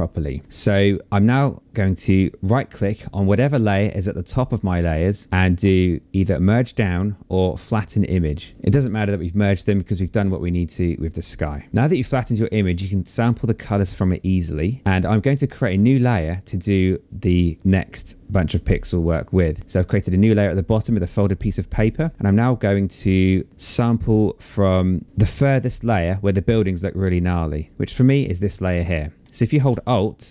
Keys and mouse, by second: 3.2 right click, 8.1 click, 16.0 click.